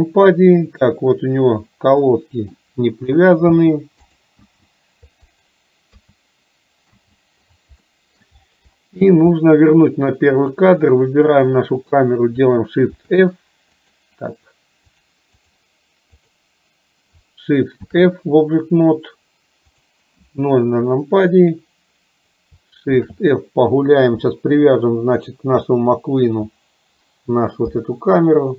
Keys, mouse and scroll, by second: 2.1 middle click, 5.4 click, 7.8 middle click, 10.5 click, 11.5 click, 15.1 click, 16.2 click.